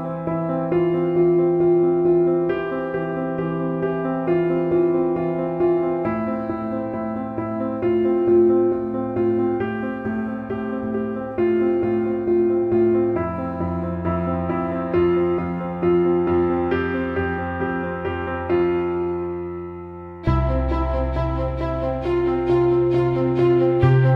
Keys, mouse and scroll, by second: 1.8 click, 3.5 click, 4.3 ctrl+r, 4.6-7.5 drag, 7.7 Left, 8.3 click, 9.4 right click, 9.7 click, 10.2 ctrl+=, 10.9-13.4 drag, 14.3 click, 15.3-17.1 shift+drag, 17.9 ctrl+=, 18.1 space, 18.2 click, 18.2 space, 18.5 click, 20.6 Right, 21.9 click, 22.3 scroll down 1, 23.2 right click.